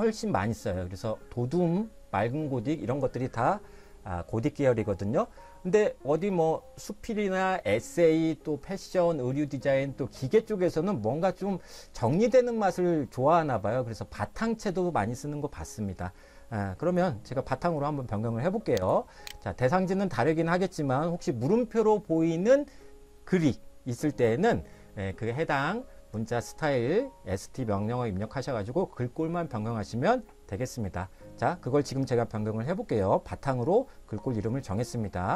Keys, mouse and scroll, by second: 18.9 click.